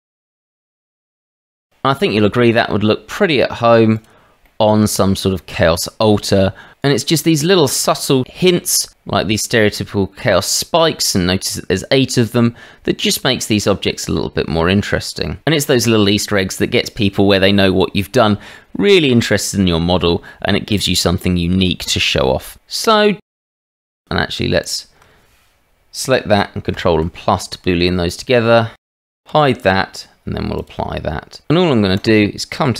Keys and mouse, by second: 0.1 Tab, 0.4 Tab, 2.2-3.2 middle drag, 3.9 click, 4.4-6.7 middle drag, 7.1-7.9 middle drag, 10.9-15.4 middle drag, 15.5-16.6 drag, 15.5-16.6 right drag, 23.6 click, 24.6 shift+click, 26.8 ctrl+KP_Add, 28.1 click, 28.8 click, 29.3 h, 30.6 click, 32.0 click.